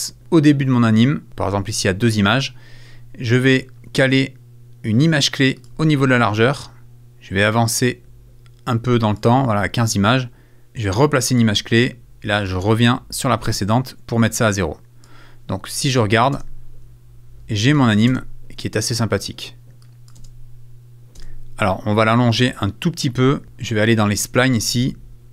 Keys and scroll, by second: 19.7 space.